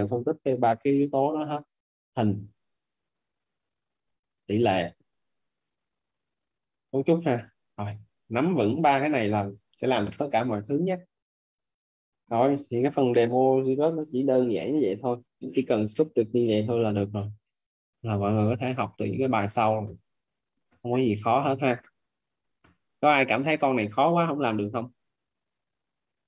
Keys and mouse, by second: 1.3 alt+`, 13.4 right click, 23.9 right click.